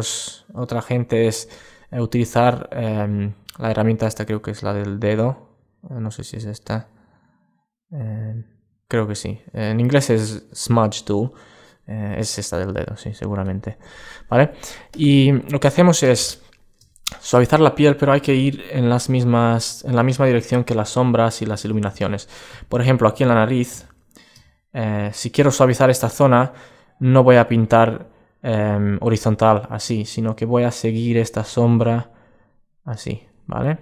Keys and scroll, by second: 20.5 super+space, 22.8 alt+space.